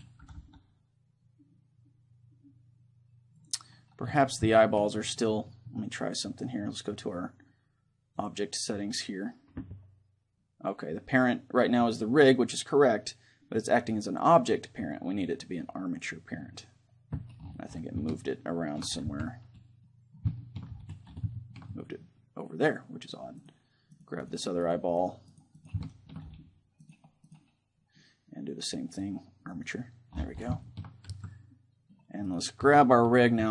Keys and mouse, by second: 0.2 r, 3.5-6.2 drag, 4.6 middle click, 6.2 right click, 8.1-10.3 drag, 14.1-16.0 drag, 18.1-23.4 middle drag, 19.1 z, 23.4-28.5 right drag, 25.9-27.8 middle drag, 28.5-29.7 middle drag, 29.7-30.7 drag, 30.7-32.3 middle drag, 31.1 a, 32.3-33.5 right drag, 32.6 a, 33.4 a.